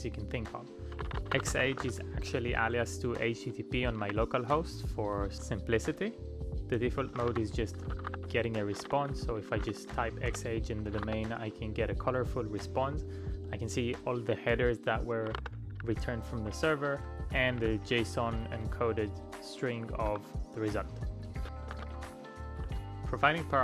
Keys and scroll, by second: 0.7-4.5 typing, 5.0 Return, 6.8-11.6 typing, 15.2-17.0 typing, 19.6-22.1 typing.